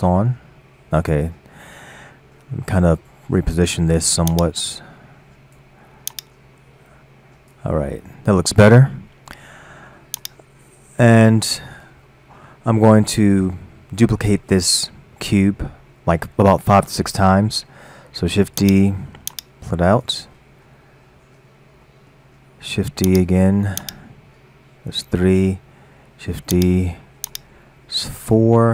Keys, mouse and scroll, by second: 0.3 scroll down 4, 0.8 scroll up 3, 1.5-4.3 scroll down 2, 4.3-7.8 drag, 7.8-8.4 scroll down 3, 8.4-10.2 scroll up 2, 10.2-11.5 drag, 11.5-12.1 scroll up 4, 12.1-15.1 middle drag, 18.5 shift+d, 19.3-20.3 drag, 20.3-21.3 middle drag, 21.3-21.9 scroll down 4, 21.9-22.9 middle drag, 22.9 shift+d, 23.8-26.3 drag, 26.3 shift+d, 28.4 click.